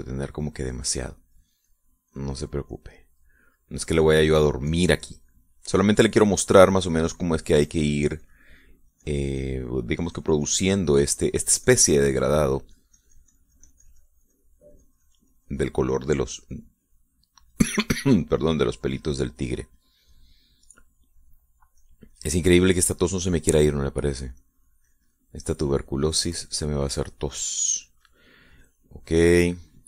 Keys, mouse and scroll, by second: 0.4 click, 2.4-4.0 drag, 4.0 middle click, 4.9 middle click, 5.7-18.0 drag, 18.9 click, 19.6-21.5 drag, 21.5 middle click, 22.8-29.8 drag.